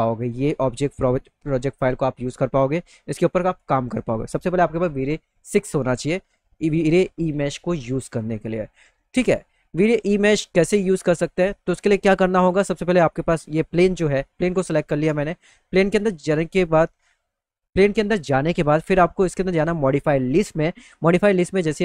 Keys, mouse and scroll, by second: 6.6 alt+middle click, 8.5 alt+middle click, 9.4 middle click, 9.9 click, 10.3 alt+middle click, 15.1 click, 20.9 click.